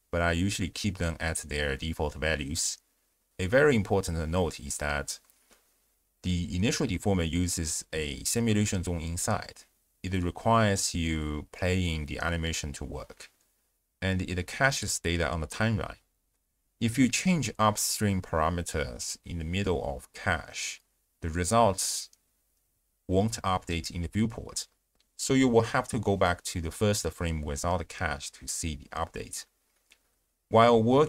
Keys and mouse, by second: 0.9 space, 3.3 ctrl+a, 3.3 ctrl+alt+shift+q, 6.2 click, 8.6 ctrl+a, 10.9 click, 11.5 space, 14.3 space, 17.0 click, 18.2 click, 19.7-20.3 drag, 21.3-25.0 drag, 26.5 shift+space, 28.9-31.0 drag.